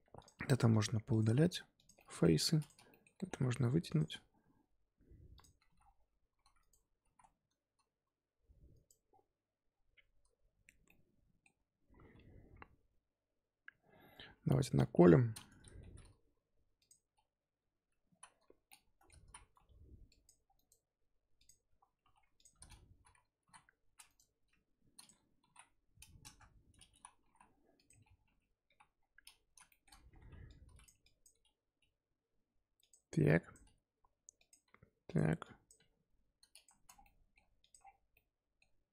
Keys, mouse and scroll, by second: 0.0 3, 0.2 click, 0.7 shift+click, 1.1 shift+click, 1.4 x, 1.9 middle click, 2.4 2, 2.6 click, 2.9 middle click, 3.2 g, 5.3 click, 5.5 s, 7.0 s, 9.0-9.7 scroll down 4, 9.7 scroll up 3, 10.8-12.9 middle drag, 12.9 Tab, 14.3 KP_3, 14.8 KP_1, 15.3-15.8 scroll up 2, 15.8 g, 17.6 Tab, 18.0 z, 18.7 middle click, 19.0 scroll up 1, 19.2 z, 19.5 2, 20.1 click, 20.4 scroll down 2, 20.5-22.0 right drag, 22.0 2, 22.3 alt+click, 23.3 s, 25.0 click, 25.4 s, 27.2 g, 28.2 KP_3, 28.6 KP_1, 29.0-29.4 scroll up 1, 29.4 z, 29.7 shift+middle click, 29.9 scroll up 4, 30.1 1, 30.4 click, 31.0 click, 31.3 g, 33.2 click, 33.6 g, 34.6 g, 35.4 click, 35.7 g, 36.7 z, 36.9 scroll down 4, 37.0 middle click, 37.3 Tab, 37.6 click, 37.8-38.1 scroll down 2, 38.1-38.9 middle drag.